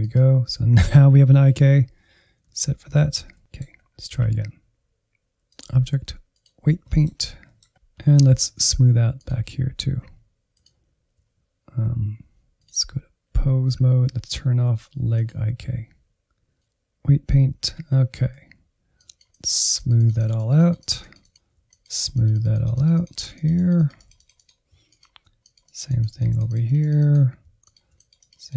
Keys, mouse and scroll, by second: 1.2-1.5 Left, 1.7-2.0 Right, 3.0 shift+click, 3.3 middle click, 3.7 scroll up 1, 4.5-6.7 drag, 6.7 middle click, 6.9-7.6 scroll up 2, 7.1 middle click, 7.6 middle click, 8.1 alt+z, 8.5 ctrl+click, 10.5 ctrl+Tab, 11.2-13.4 drag, 13.4-14.1 scroll down 1, 14.1 click, 15.0-17.2 drag, 17.2 Insert, 17.4 Insert, 17.9-19.9 drag, 19.9 Insert, 20.1 Insert, 20.3 click, 21.1-23.1 drag, 23.3-24.6 drag, 24.7-26.4 drag, 26.4 middle click, 26.6 click, 27.4 Insert, 27.6 middle click, 28.4 click.